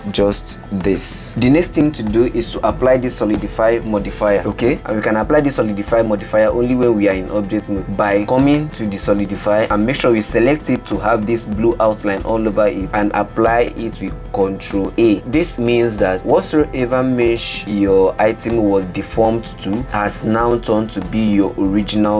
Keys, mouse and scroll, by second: 8.8 scroll down 3, 9.6-10.8 scroll down 33, 10.8 click, 14.8 ctrl+a.